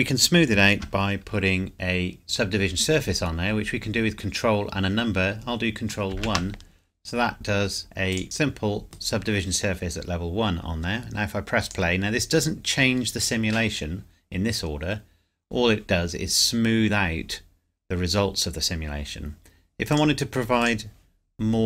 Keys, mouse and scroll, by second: 6.1 ctrl+1, 8.1 click, 8.7 scroll up 1, 8.8 middle click, 9.9-11.6 scroll down 1, 11.6 click, 19.9 click, 20.1 click.